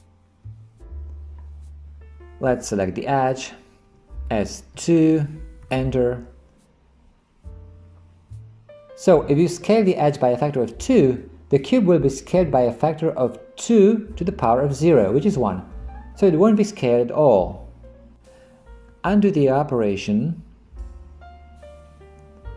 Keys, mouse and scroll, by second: 4.3 s, 19.1 ctrl+z, 20.6 ctrl+z.